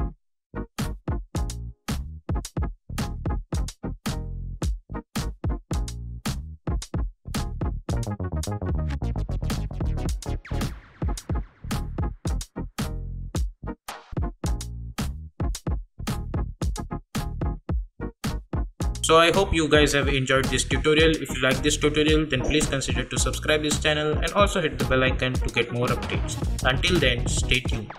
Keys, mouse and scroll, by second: 1.6 s, 2.2-7.2 drag, 7.4 click, 9.1 space, 11.5 space, 11.8 click.